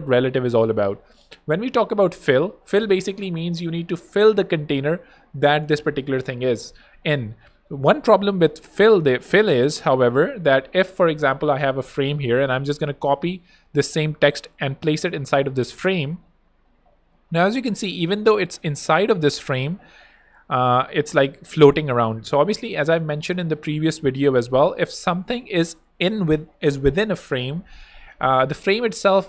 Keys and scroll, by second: 8.2 f, 13.9 super+c, 14.8 super+v, 18.3 alt+a.